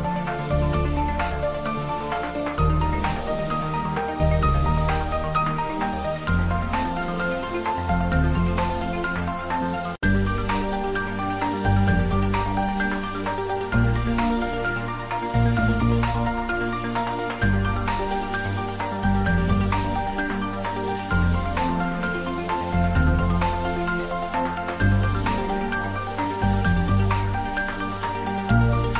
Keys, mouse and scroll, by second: 0.3 g, 2.8 click, 3.0 Tab, 3.7 Tab, 4.7 click, 6.2 ctrl+r, 6.4 click, 7.2 ctrl+z, 8.1 click, 9.5 click, 9.7 Tab, 9.9 ctrl+middle click, 10.4-12.4 middle drag, 12.4 Tab, 13.3 click, 14.2 Tab, 14.3 click, 14.8 Tab, 15.5 4, 15.7 click, 16.1 4, 16.3 click, 16.4 3, 16.6 click, 17.2 o, 17.8 click, 18.1 Tab, 18.4 middle click, 19.1 ctrl+middle click, 19.4 middle click, 20.0 ctrl+s, 20.3 ctrl+middle click, 20.6 middle click, 21.7 middle click, 22.4 ctrl+middle click, 23.3 ctrl+click, 23.9 s, 24.6 click, 25.7 ctrl+middle click, 26.0 click, 26.4 ctrl+s, 26.6 middle click, 27.0 ctrl+middle click, 27.7 click, 28.1 ctrl+middle click, 28.6 shift+z.